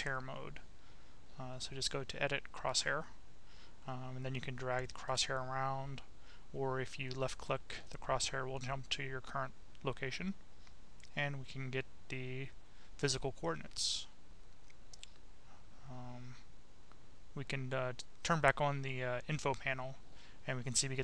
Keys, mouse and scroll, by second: 0.2 click, 2.2-4.8 drag, 7.8 click, 11.4 click, 12.6-14.5 drag, 14.7 click, 17.1 click, 18.7 click, 20.0 click.